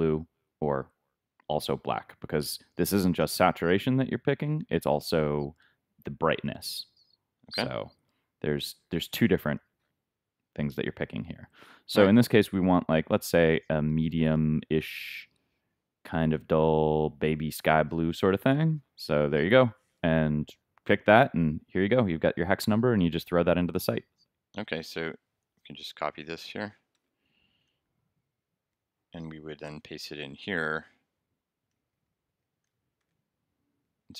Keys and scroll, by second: 26.9 super+c, 27.6 super+Tab, 31.7 shift+Right, 32.7 shift+super+Right, 33.0 shift+super+v, 33.7 super+v.